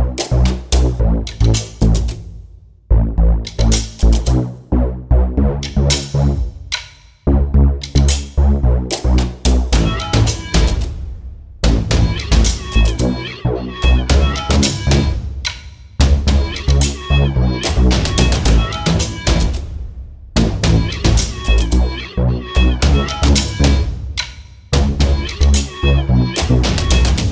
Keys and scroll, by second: 0.2 s, 2.0 space, 2.6 h, 3.1 space, 3.6 s, 6.1 space, 8.7 space, 10.1 Delete, 15.5 space, 20.9 m, 25.1 space.